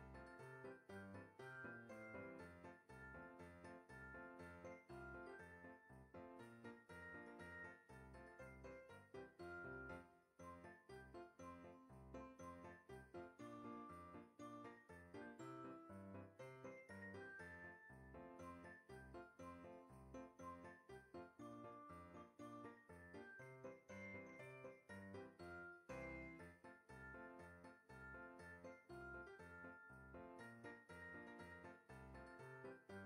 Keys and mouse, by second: 0.3 o, 1.8 click, 2.1 g, 2.5 click, 3.1 alt+z, 3.6 Tab, 4.4 middle click, 6.2-9.6 typing, 7.7 click, 8.5 click, 9.4 click, 10.6 click, 11.1 KP_1, 13.2 F6, 13.9 Tab, 14.9 click, 15.7 x, 16.1 click, 16.5 Tab, 17.7 click, 19.0 click, 19.7 shift+middle click, 21.1 shift+middle click, 22.3 click, 24.7 click, 27.1 click, 28.1 right click, 28.4 click, 31.4 click.